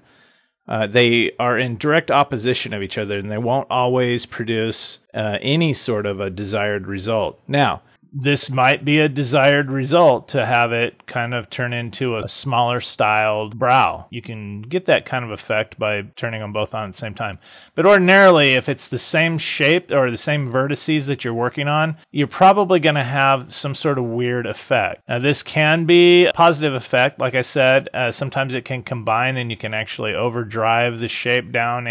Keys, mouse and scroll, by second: 8.8 click, 9.9 click, 12.1 click, 14.1 click, 17.8 click.